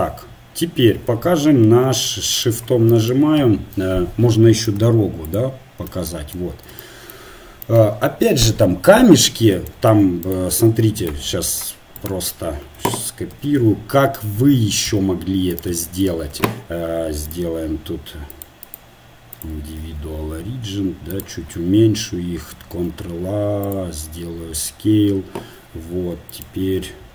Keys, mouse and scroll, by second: 10.3-12.0 right drag, 13.3 shift+d, 19.5-21.1 drag, 19.9 s, 23.7 ctrl+a.